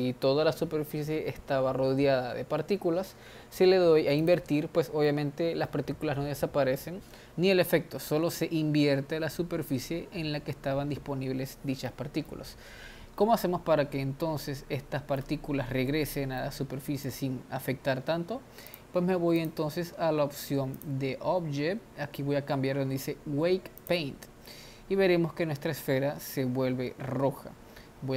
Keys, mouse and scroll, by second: 0.0 click, 4.3 click, 5.0-8.9 middle drag, 11.9-18.7 middle drag, 18.7 click, 20.8-24.0 drag.